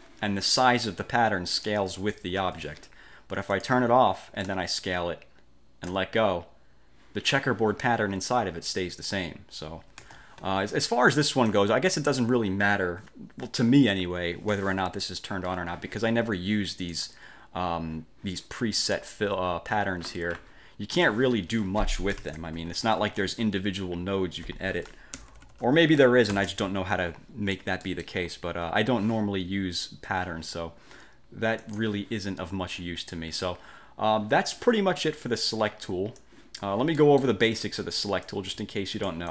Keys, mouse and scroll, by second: 2.5 ctrl+z, 3.6 click, 4.9-6.2 ctrl+shift+drag, 10.2 ctrl+z, 11.5 click, 17.1 click, 19.4-19.8 scroll up 1, 21.1 click, 22.4 ctrl+shift+c, 22.7 ctrl+shift+F2, 23.3-23.6 ctrl+scroll up 1, 25.3 ctrl+shift+k, 26.5 ctrl+shift+c, 27.6 F1, 28.0 click, 28.4 F2, 28.7 1, 31.8 click, 35.1-36.2 drag, 36.3-36.9 drag, 37.1 click.